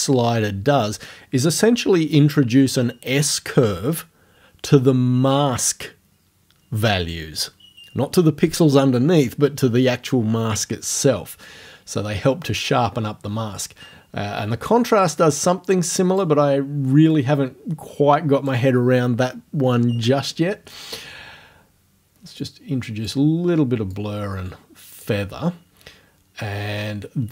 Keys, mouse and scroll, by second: 14.7-16.4 drag, 17.2-18.6 drag, 22.4 click, 24.0-25.2 drag.